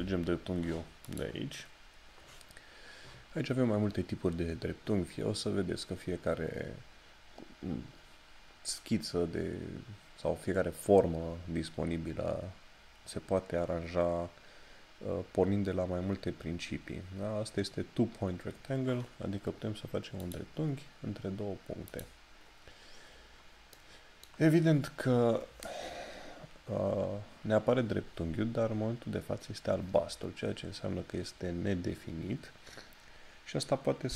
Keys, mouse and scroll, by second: 1.0 click, 20.2 click.